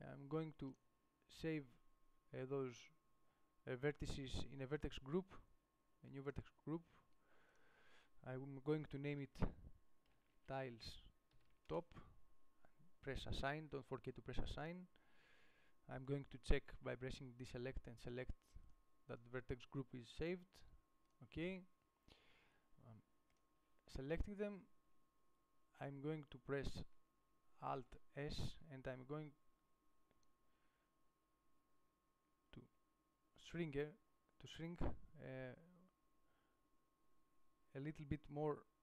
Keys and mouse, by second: 12.0-15.0 middle drag, 25.4-28.3 middle drag, 28.3 alt+s.